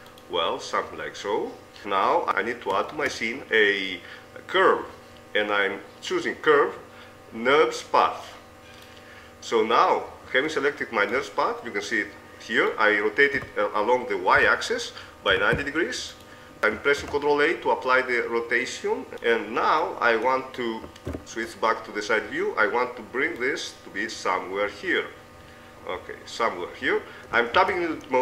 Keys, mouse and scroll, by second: 1.8 click, 2.2 Tab, 3.1 shift+a, 10.0-12.4 middle drag, 13.6 r, 17.5 ctrl+a, 21.4 KP_3, 27.8 Tab.